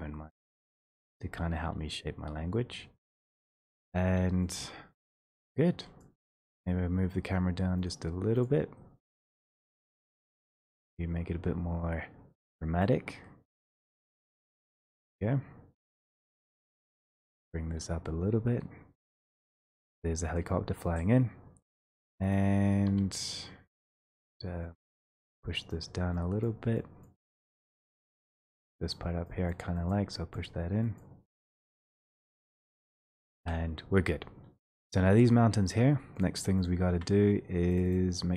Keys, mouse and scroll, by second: 0.3 1, 0.9 click, 3.6 click, 4.5 shift+click, 5.1 shift+click, 5.5 w, 6.2 click, 7.0 middle click, 7.9 click, 8.4 click, 10.5 middle click, 10.7 scroll, 12.8 right click, 12.8-13.2 scroll, 22.3 click, 22.9 3, 24.0 click, 24.8 click, 25.4 click, 25.8 click, 26.5 click, 27.1 click, 27.9 click, 28.3 click, 29.1 click, 29.8 click, 29.9 click, 30.5 click, 31.2 click, 31.4 click, 31.8 click, 32.2 click, 32.9 click, 33.4 1, 34.6 click, 35.9 shift+click, 36.4 shift+click, 37.8 middle click, 38.0 middle click.